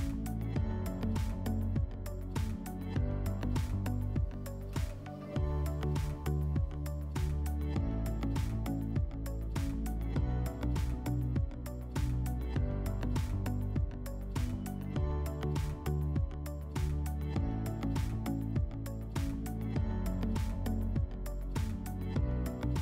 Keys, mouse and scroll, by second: 1.1-2.6 drag, 4.4-6.0 drag, 7.4-9.0 drag.